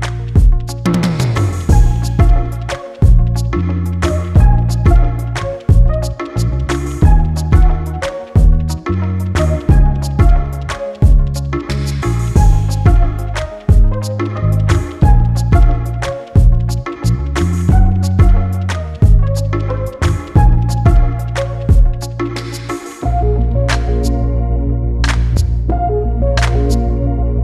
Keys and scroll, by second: 4.2 e.